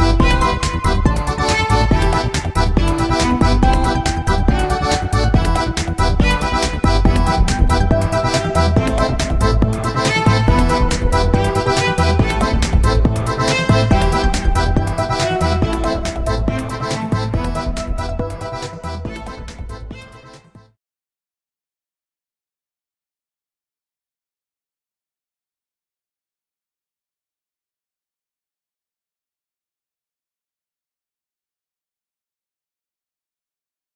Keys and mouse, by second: 1.3 z, 3.3 shift+s, 8.6-10.4 drag, 10.4 middle click, 10.5 click, 10.6-11.7 middle drag, 12.6-14.0 drag, 14.0 r, 14.1 click, 16.7-18.4 drag, 18.4-21.4 middle drag, 21.0 click, 21.4-22.5 right drag, 22.5 g, 25.9-28.6 middle drag, 29.3-31.1 drag, 31.3-32.3 middle drag, 32.3 click, 32.3-33.9 right drag.